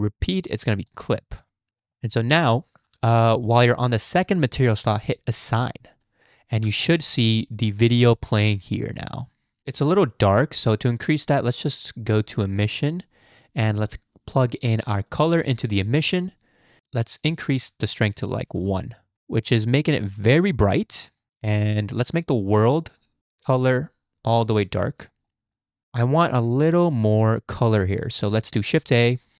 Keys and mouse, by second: 1.7 Tab, 3.3 Tab, 6.6 Tab, 9.8 middle click, 10.0 click, 12.1 middle click, 15.1 middle click, 15.3-16.1 middle drag, 17.3-18.6 middle drag, 20.2 drag, 20.8 middle click, 21.3-21.9 middle drag, 22.9 click, 25.3 middle drag, 26.3 g, 28.8 shift+a.